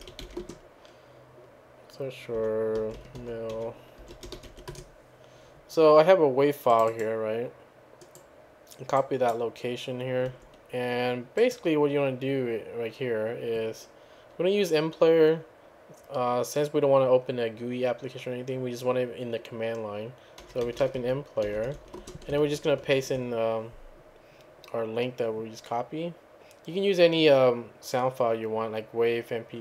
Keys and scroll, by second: 0.0-0.7 typing, 2.2-5.0 typing, 6.9-7.6 typing, 20.2-22.2 typing, 22.8 ctrl+v.